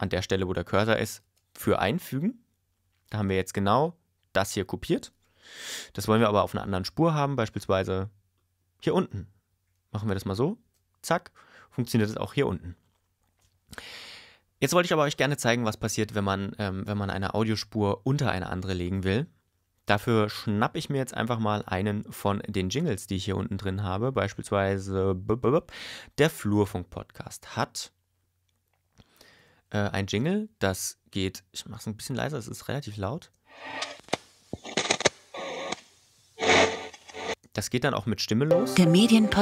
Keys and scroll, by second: 1.2 super+v, 6.1 y, 10.6 super+v, 33.2 space, 37.3 space.